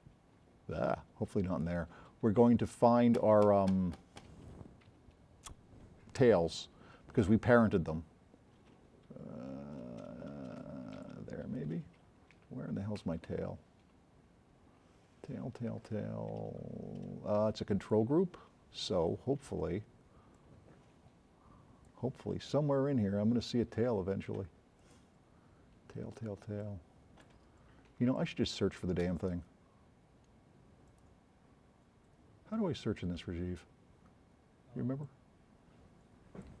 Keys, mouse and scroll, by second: 10.9 click, 17.9 click, 24.8 click, 29.2 click, 30.9 click, 35.1-36.5 drag.